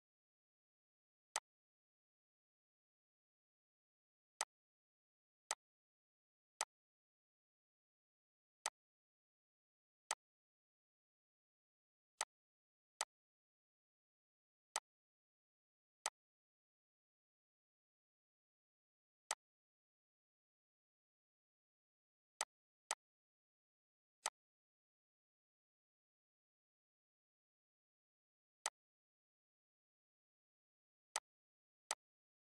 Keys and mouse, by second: 4.0 click, 18.9 click, 22.1 click, 28.3-32.5 drag.